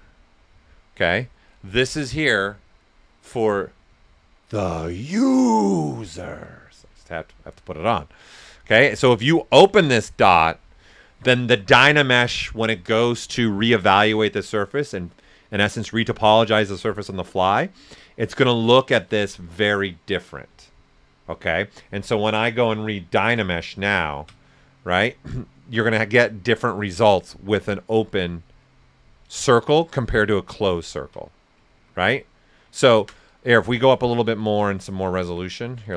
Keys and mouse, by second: 10.1 click, 10.1 typing, 22.6-23.1 typing, 23.8 ctrl+click, 26.9 alt+right click, 28.0 ctrl+right click, 30.0 click, 30.6 ctrl+click, 31.7 ctrl+z, 32.8 alt+right click, 34.1 ctrl+right click, 34.9 ctrl+z.